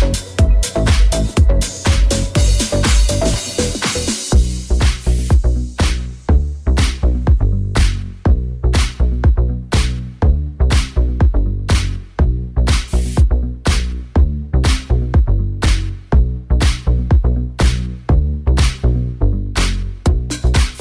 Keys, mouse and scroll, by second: 4.2 alt+z, 6.5 shift+z, 6.8 shift+z, 7.8 right click, 20.2 middle click, 20.2 right click, 20.5 middle click, 20.5 right click.